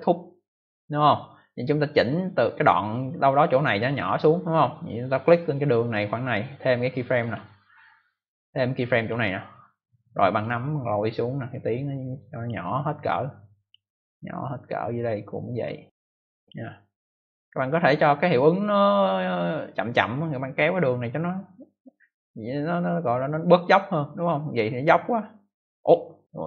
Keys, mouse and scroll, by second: 7.1 click, 9.0 click, 10.3 click, 13.6 click, 18.7 click, 24.4 click.